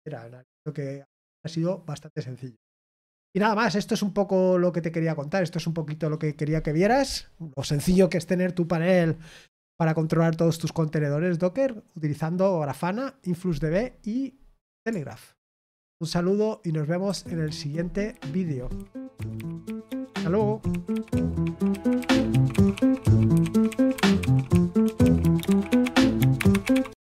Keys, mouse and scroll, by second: 27.0 click.